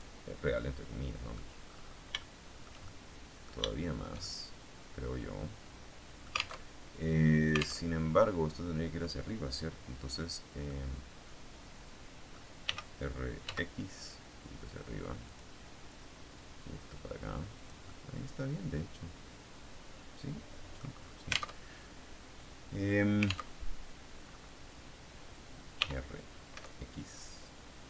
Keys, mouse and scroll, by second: 0.3-1.4 middle drag, 1.4-2.1 scroll up 3, 2.1 shift+middle click, 3.2 middle click, 6.6 alt+Tab, 7.8 alt+Tab, 8.3-9.0 scroll down 2, 10.6 click, 10.9-12.4 middle drag, 12.6 r, 13.5 x, 15.2 click, 16.4-20.8 drag, 20.8-21.5 scroll down 1, 21.5 alt+Tab, 23.5 alt+Tab, 25.7 r, 26.4 x.